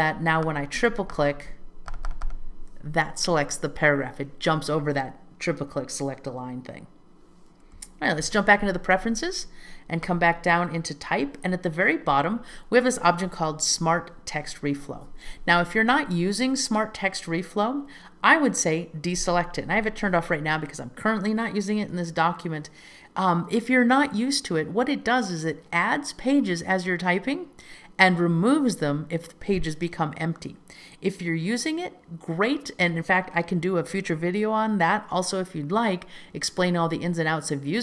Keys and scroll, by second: 8.2 super+k.